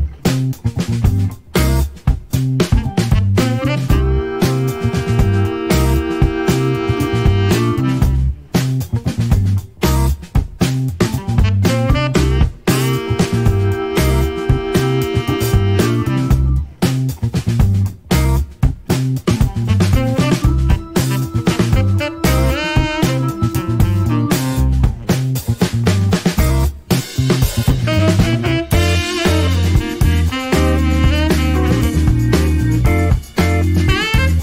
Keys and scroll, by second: 2.9 KP_Decimal, 3.1 KP_1, 3.2 Return, 4.4-5.3 typing, 7.6 ctrl+s, 8.5 alt+a, 28.2 Escape.